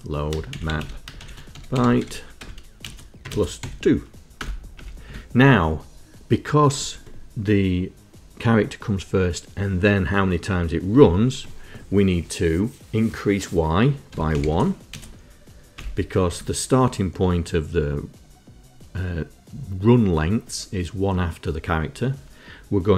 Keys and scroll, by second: 0.0-3.7 typing, 3.3 KP_Add, 4.4 Return, 4.8 Return, 5.1 Tab, 13.9-15.0 typing, 15.8 Return.